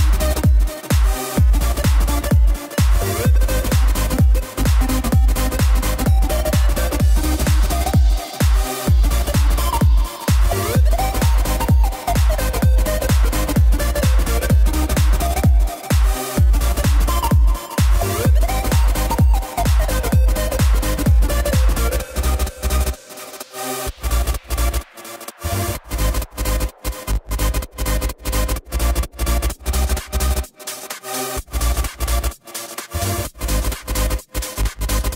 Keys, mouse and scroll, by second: 12.8-16.8 drag, 17.4 i, 21.7 click, 33.6-35.1 drag.